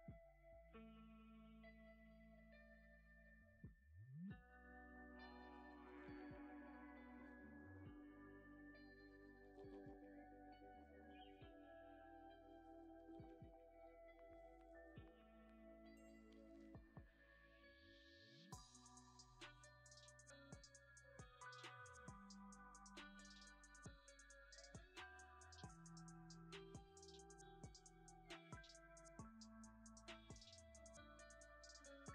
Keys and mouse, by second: 0.6-2.3 drag, 3.0 Tab, 3.5 click, 4.0 click, 5.1 click, 5.9 click, 6.8 click, 7.2 click, 8.2 click, 8.9 middle click, 8.9 click, 9.0 middle click, 9.3 middle click, 9.6 middle click, 9.9 shift+middle click, 10.6 KP_0, 11.4 shift+click, 11.9 z, 12.7 ctrl+s, 13.6-14.9 middle drag, 15.1 shift+a, 19.0-20.5 drag, 21.5-21.8 drag, 21.8 middle click, 22.1 middle click, 22.7 shift+middle click, 23.2 g, 23.8 click, 24.5 alt+click, 25.0 alt+click, 25.6 shift+click, 26.0 r, 26.7 click, 27.0 s, 27.5 click, 27.8 g, 28.1 click, 29.0-30.3 middle drag, 31.2 click.